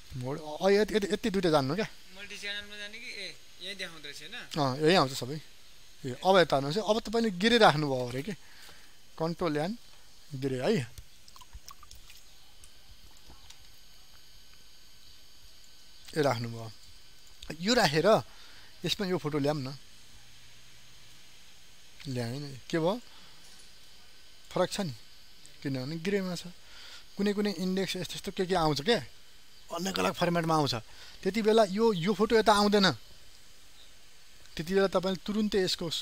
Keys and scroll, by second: 9.3 ctrl+n.